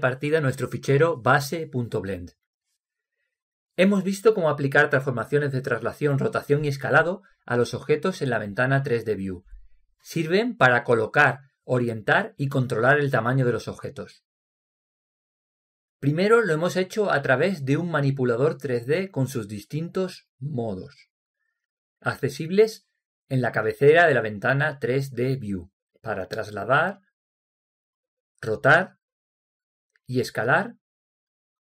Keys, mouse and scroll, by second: 0.5-2.1 drag, 3.2-7.3 drag, 27.2-31.7 drag.